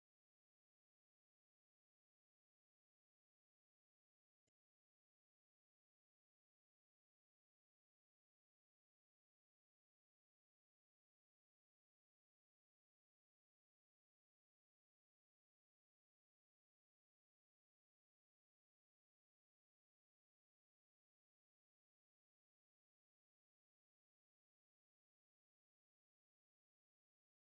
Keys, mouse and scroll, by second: 0.1-1.9 shift+middle drag, 1.9 shift+f, 5.7-6.7 middle drag, 7.9 middle click, 8.4 KP_0, 8.9 scroll down 1, 9.1 shift+middle click, 9.6-11.9 drag, 17.1-17.8 scroll up 7, 17.8 scroll down 2, 18.8 click, 19.0 scroll down 1, 19.6 click, 20.1 scroll up 1, 20.3 click, 20.5 0, 20.9 scroll up 1, 21.0-22.0 middle drag, 22.0-27.6 drag.